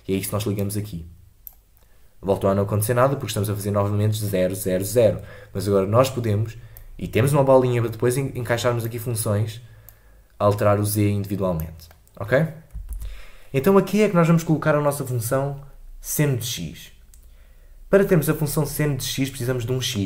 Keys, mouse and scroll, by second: 12.9 ctrl+z.